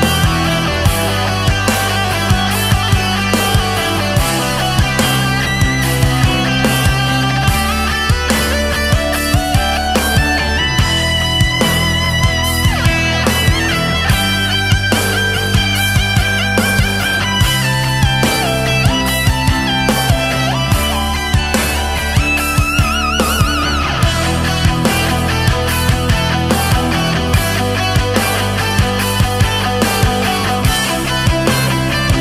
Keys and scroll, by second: 3.4 ctrl+z, 4.3 ctrl+z, 5.6 ctrl+z, 6.5 ctrl+z, 6.7 ctrl+z, 9.1 ctrl+z, 10.2 ctrl+z, 10.8 ctrl+z, 11.0 ctrl+z, 12.5 space, 13.2 space, 15.6 space, 16.0 ctrl+z, 16.7 ctrl+z, 17.1 space, 19.9 space, 22.1 ctrl+z, 22.3 ctrl+z, 23.3 ctrl+z, 24.1 ctrl+z, 24.6 ctrl+z, 25.1 space, 25.6 ctrl+z, 27.8 ctrl+z, 30.2 ctrl+z, 31.1 ctrl+z.